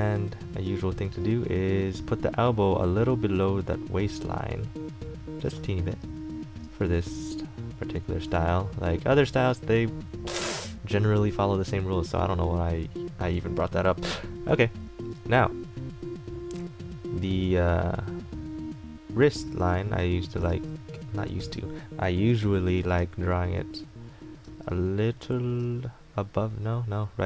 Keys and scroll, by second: 0.8 a, 6.1 e, 6.8 a, 8.5 ctrl+z, 19.7 ctrl+z, 23.0 ctrl+z.